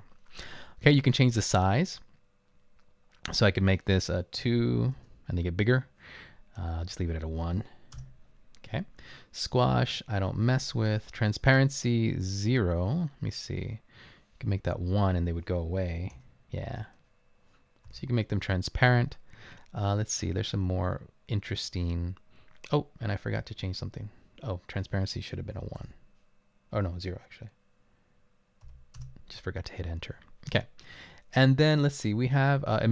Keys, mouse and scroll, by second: 4.4 typing, 5.0 Return, 7.1-7.9 typing, 8.0 Return, 15.3 1, 16.2 Return, 18.1 0, 19.8-21.0 scroll down 2, 23.3-24.0 scroll up 2, 24.0 scroll up 1, 25.8 BackSpace, 28.8 0, 29.0 Return, 30.7-31.3 scroll down 1, 31.3 scroll down 1.